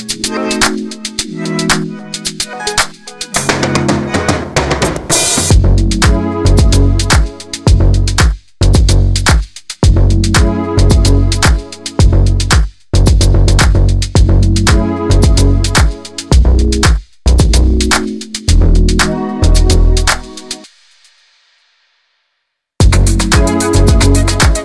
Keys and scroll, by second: 11.6 Delete, 12.5 v, 13.8 alt+space, 16.2 ctrl+alt+z, 19.8 ctrl+t, 22.7 alt+space.